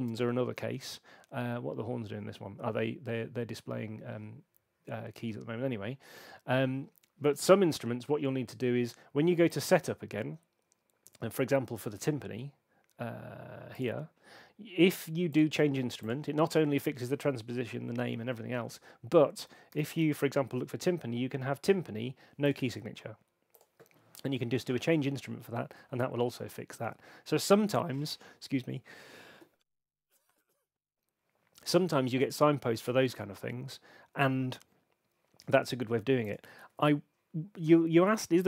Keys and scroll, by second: 19.4-20.6 typing, 36.5 super+2.